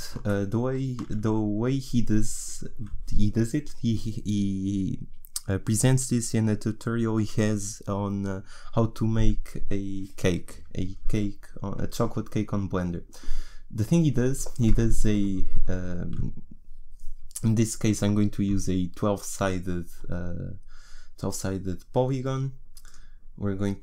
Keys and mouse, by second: 23.0 click.